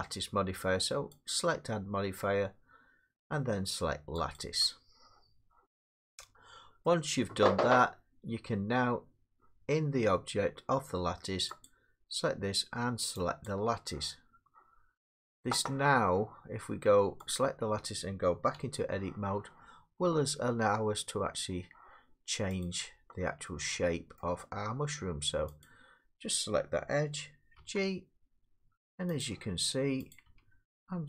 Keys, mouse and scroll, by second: 1.3 click, 4.4 click, 6.9 middle click, 11.7 click, 13.5 click, 17.4 click, 18.6 Tab, 22.6 click, 24.2 middle click, 25.6 click, 27.6 g, 29.2 click, 30.1 click, 30.3 g.